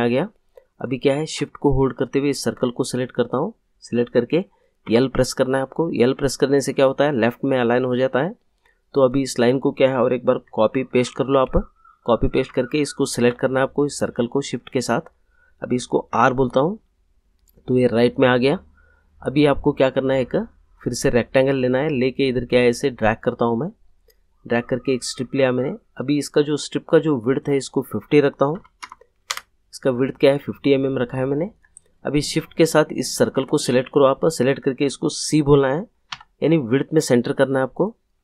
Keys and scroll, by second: 4.8 l, 10.4 ctrl+c, 10.9 ctrl+v, 16.1 r, 28.5 5, 28.8 0, 29.3 Return, 36.1 c.